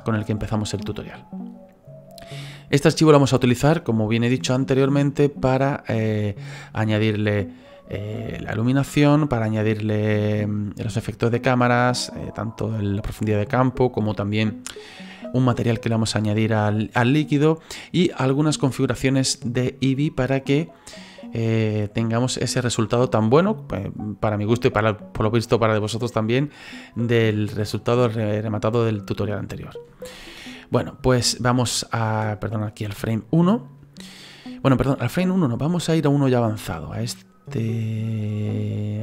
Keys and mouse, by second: 0.9 middle click, 30.1 click, 32.6 click, 35.1 click.